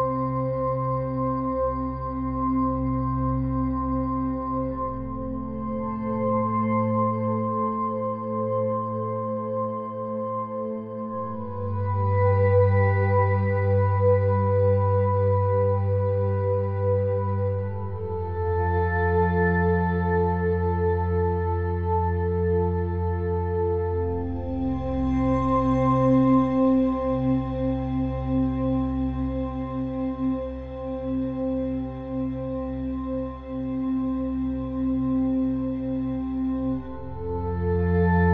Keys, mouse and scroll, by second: 0.1 click, 1.0 click, 1.9 click, 2.8 click, 3.9 middle click, 5.5 click, 6.3 middle click, 7.0 z, 7.2 z, 11.0 middle click, 11.1 click, 12.6-13.9 middle drag, 13.9 ctrl+z, 15.6 a, 15.8 a, 16.2 KP_1, 17.2 shift+d, 17.7 r, 19.3 click, 20.4-23.6 drag, 23.6 ctrl+e, 24.2 middle click, 25.5 middle click, 25.9 click, 26.2 ctrl+KP_Add, 26.9 click, 28.3 Tab, 28.9 Tab, 29.3 ctrl+r, 30.2 ctrl+r, 31.2 ctrl+r, 33.1 middle click, 33.6 ctrl+r, 35.4 middle click, 35.9 middle click, 37.1 middle click, 37.8 ctrl+r.